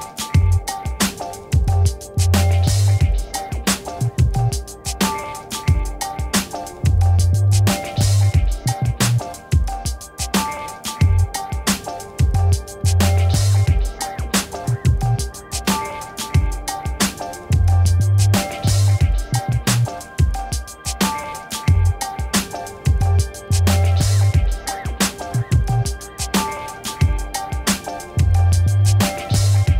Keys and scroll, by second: 8.2 ctrl++, 10.7 BackSpace, 12.5 ctrl+z, 14.6 ctrl+d, 21.4 BackSpace, 22.0 ctrl+d, 26.9 ctrl++, 27.6 space.